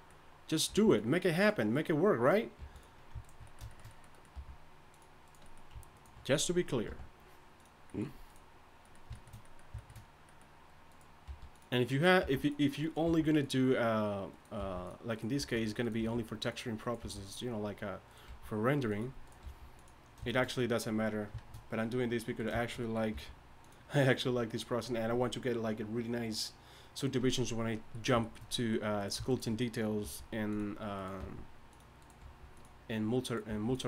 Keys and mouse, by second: 0.1 click, 0.7 g, 1.4 click, 2.6 g, 4.3 click, 4.3 g, 6.9 g, 11.2 g, 12.2 g, 13.1 g, 14.6 g, 15.4 g, 16.0 g, 17.0 g, 18.3 g, 19.4 g, 23.1 g, 30.0 g, 31.2 g, 32.2 g, 33.5 g.